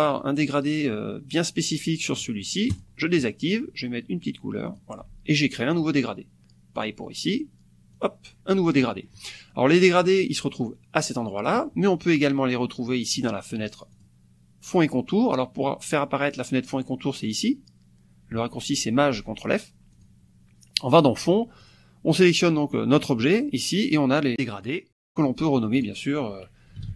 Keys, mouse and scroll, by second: 2.7 click, 4.7 click, 5.8 click, 6.8 click, 7.9 click, 8.8 click, 10.2-11.7 drag, 13.9 click, 19.9 click, 21.6 click, 23.0 click, 25.1 click, 26.5-26.9 typing.